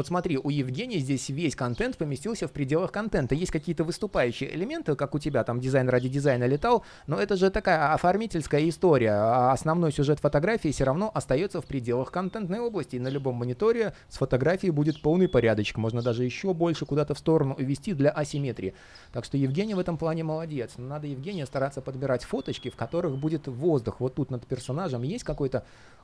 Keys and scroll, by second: 14.6 super+z.